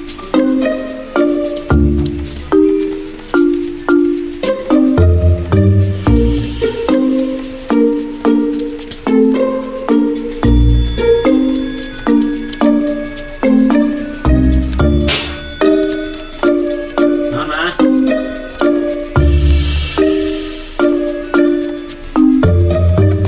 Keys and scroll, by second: 8.5 x, 9.0 x, 9.3 x, 12.6 typing, 15.3 ctrl+z, 20.0-20.8 typing.